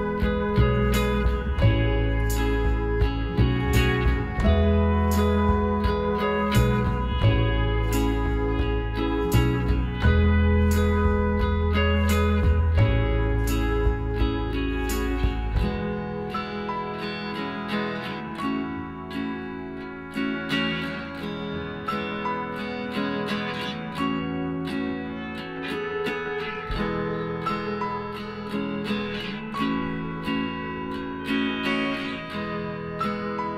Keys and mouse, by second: 0.2 KP_Divide, 0.8 a, 4.2 z, 4.9 z, 5.3-6.5 right drag, 6.1 KP_Divide, 6.4 click, 7.3 Tab, 9.3-10.8 middle drag, 11.0-13.5 right drag, 13.5 g, 15.5-18.5 middle drag, 16.6 KP_Decimal, 18.5-20.3 right drag, 19.6 g, 21.1-22.8 middle drag, 23.2-24.9 drag, 24.1 a, 24.9 w, 28.0-29.7 middle drag, 29.4-31.7 right drag, 30.8 middle click, 31.7-33.5 middle drag.